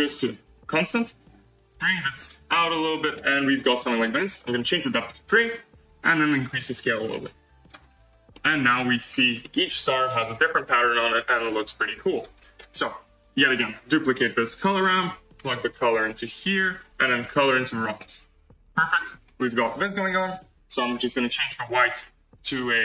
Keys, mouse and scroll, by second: 7.9-8.3 scroll down 1, 8.3-9.0 shift+middle drag, 9.0 scroll up 1, 9.3-10.9 middle drag, 10.9-11.2 scroll up 2, 11.2-13.4 middle drag, 13.4 click, 13.9 shift+d, 15.6-17.2 drag, 18.0 click, 18.8-19.8 scroll up 6, 21.1-22.8 drag.